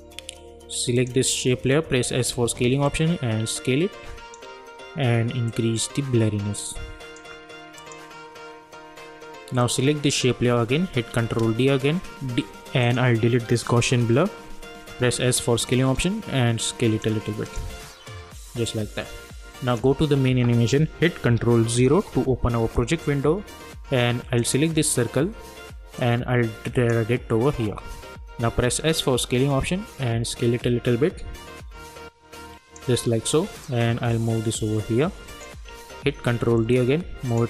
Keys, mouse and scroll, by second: 1.9 s, 2.4 s, 3.1-5.5 drag, 7.3-7.8 drag, 11.1 ctrl+d, 12.8 click, 14.9 s, 15.7-17.4 drag, 19.7 click, 21.9 ctrl+0, 24.4-28.2 drag, 28.2 s, 29.0-36.1 drag, 36.1 ctrl+d, 36.7 click.